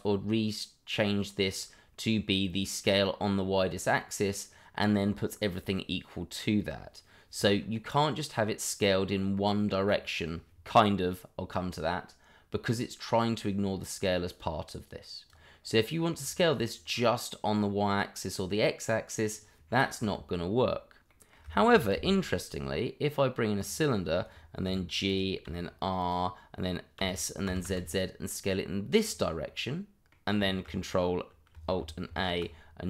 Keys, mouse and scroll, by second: 14.3 click, 15.6-16.1 scroll down 1, 16.1 click, 16.4-16.8 scroll down 1, 16.8 middle click, 17.7 middle click, 20.0 Delete, 21.1 middle click, 21.7 shift+a, 23.6 click, 24.6 g, 25.1 click, 25.4 r, 26.0 click, 26.9 s, 29.0 z, 29.0 click, 29.4 middle click, 30.5 shift+middle click, 30.5 middle click, 30.7-31.5 scroll up 1, 32.0 ctrl+alt+a.